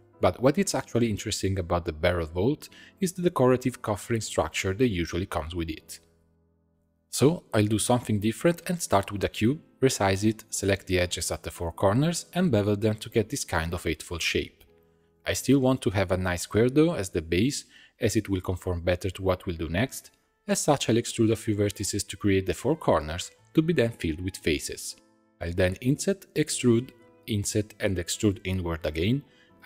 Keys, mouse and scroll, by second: 6.5 shift+a, 8.1 Tab, 8.4 s, 9.8 s, 10.9 middle click, 11.1 shift+click, 11.3 middle click, 12.0 shift+click, 12.2 shift+middle click, 12.3 ctrl+b, 15.4 middle click, 15.7 1, 15.9 e, 16.4 middle click, 17.2 click, 17.4 e, 18.1 middle click, 18.6 click, 18.8 e, 19.6 middle click, 20.2 click, 20.4 e, 21.3 click, 21.7 click, 22.1 shift+click, 22.6 shift+click, 23.0 f, 23.2 middle click, 24.0 click, 24.4 shift+click, 24.9 shift+click, 25.3 f, 25.6 i, 27.0 e, 28.0 i, 28.7 e.